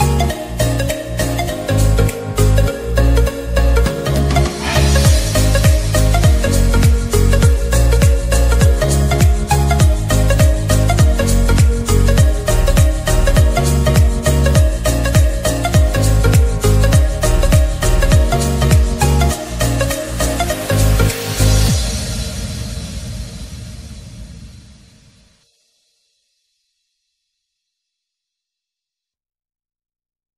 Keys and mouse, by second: 9.3 click, 9.4 click, 17.3 click, 21.5 click, 25.0 ctrl+-, 26.7-28.2 drag, 28.2 ctrl+=.